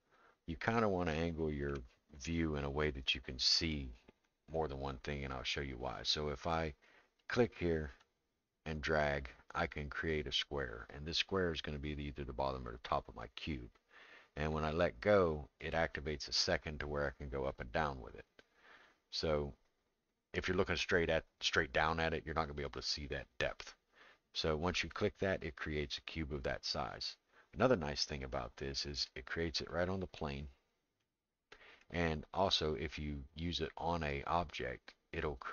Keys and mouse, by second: 1.2 shift+middle click, 7.2 click, 8.0-24.8 drag, 29.1-30.2 middle drag, 31.1 middle click.